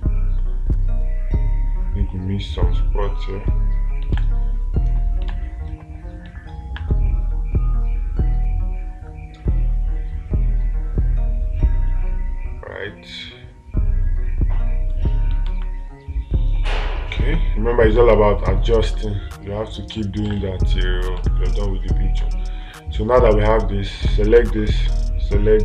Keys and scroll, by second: 4.6 space, 5.8 space, 15.9 space, 18.4 space, 19.3 space, 21.6 space.